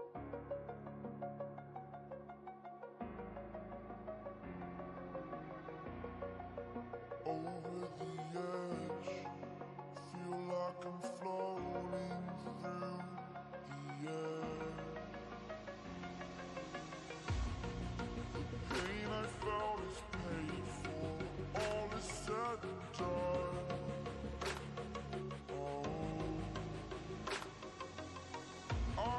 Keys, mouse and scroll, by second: 0.8 ctrl+space, 1.2 ctrl+click, 10.9-11.8 drag, 20.8-22.4 drag, 23.0 right click, 24.7 click, 27.6-29.1 drag.